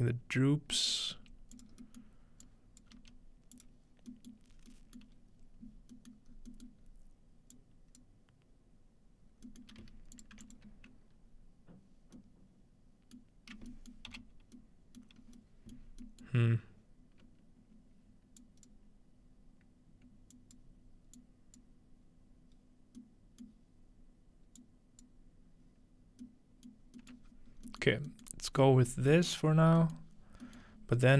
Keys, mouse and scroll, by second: 0.2-1.4 scroll down 1, 1.2 g, 1.6-2.9 drag, 2.9 typing, 4.5-5.4 scroll up 1, 5.4-6.3 scroll down 2, 6.3 scroll up 1, 6.8-7.4 scroll up 1, 7.5-8.5 drag, 9.6-11.0 middle drag, 10.2 click, 10.4 1, 10.5 click, 13.2-14.7 middle drag, 13.5-15.2 scroll down 1, 15.2 middle click, 15.2-15.9 scroll up 1, 15.9 middle click, 15.9 scroll down 1, 16.3 middle drag, 18.4 click, 20.3 click, 21.2 click, 23.6-25.1 middle drag, 24.6-26.7 drag, 26.7 middle drag, 26.8-28.5 scroll down 3, 27.1 middle click, 28.5-30.1 scroll up 4, 30.1 scroll down 2, 30.3 middle click, 30.6 middle click, 30.7-31.1 scroll down 4.